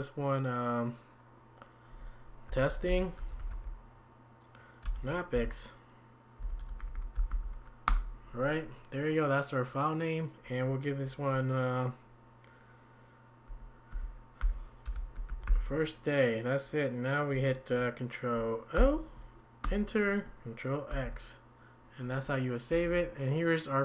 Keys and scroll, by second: 2.5-4.0 typing, 5.3-7.9 typing, 13.5 1, 15.0-16.0 typing, 18.7 ctrl+o, 19.6 Return, 20.9 ctrl+x, 22.7 Down, 22.9 Down.